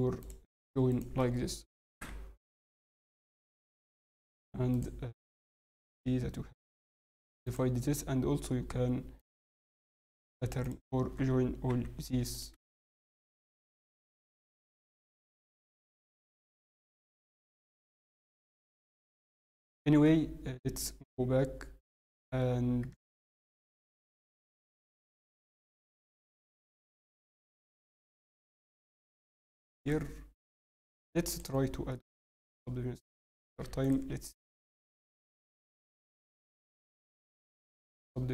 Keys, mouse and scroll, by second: 0.2 click, 0.2 scroll up 4, 2.0 j, 4.0 click, 10.6 shift+click, 11.6 j, 12.3 click, 12.7 shift+click, 13.5 j, 14.0 middle click, 14.9 middle click, 15.3 scroll, 15.8 click, 15.8 scroll up 3, 16.4 shift+click, 17.2 h, 18.1 ctrl+z, 18.8 j, 19.1-19.9 scroll down 6, 19.4 Tab, 19.9 Tab, 20.0 middle click, 22.0 shift+middle click, 22.4 scroll, 23.1 scroll up 3, 25.5 Tab, 25.7 scroll down 4, 25.8 scroll, 25.9 shift+middle click, 26.3 scroll, 26.4 Tab, 27.0 ctrl+r, 28.6 shift+middle click, 31.5 scroll, 31.9 middle click, 31.9 scroll down 5, 32.5 scroll, 33.6 scroll up 4, 36.3 click, 37.0 click.